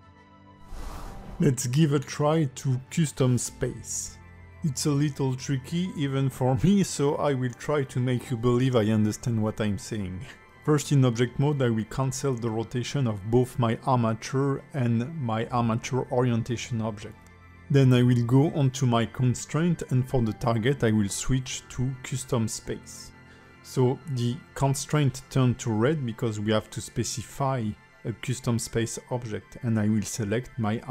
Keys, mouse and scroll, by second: 1.3 middle click, 1.3 scroll up 2, 1.5 middle click, 2.3 click, 3.0 r, 10.5 r, 11.0 click, 11.6 alt+r, 12.5 click, 13.2 ctrl+Tab, 13.4 click, 14.7 click, 15.5 click, 22.2 click, 27.9 click.